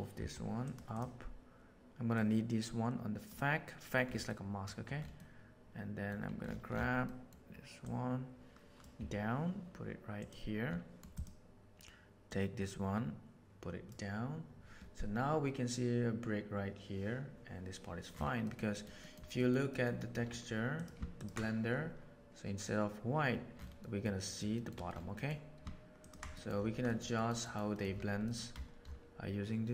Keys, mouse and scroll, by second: 0.1 g, 0.9 drag, 2.1-3.2 drag, 4.2 middle click, 5.2 middle click, 7.0 middle click, 7.8-8.8 drag, 8.9 g, 11.1 click, 12.2-13.8 drag, 18.5 middle click, 19.1 middle click, 19.3 middle click, 19.7 middle click, 20.7 click, 23.9 middle click, 24.3 middle click, 24.5 middle click, 25.2 middle drag, 26.2 middle click, 26.9 middle drag, 27.5 middle click, 28.2 middle click.